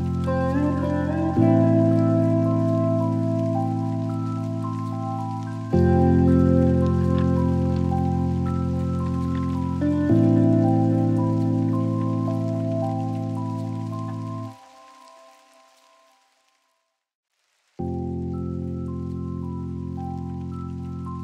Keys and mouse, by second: 1.1-2.0 drag, 2.6-3.4 drag, 5.2 click, 5.4 click, 5.6 click, 5.8 click, 7.8 click, 11.5 click, 12.1 click, 20.1 click.